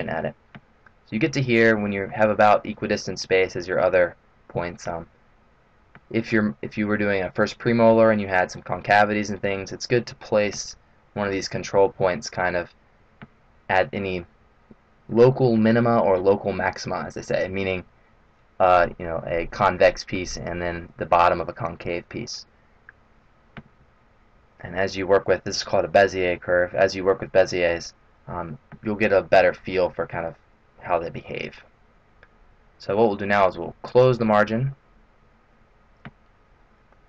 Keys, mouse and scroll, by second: 33.8 click, 36.8 middle click.